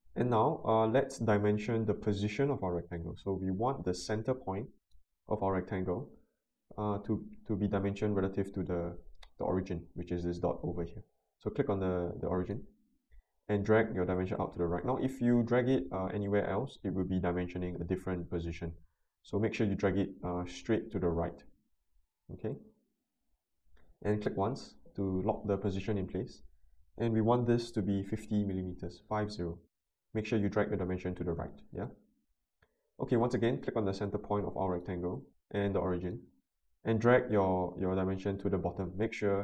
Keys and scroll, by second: 27.6-28.5 typing.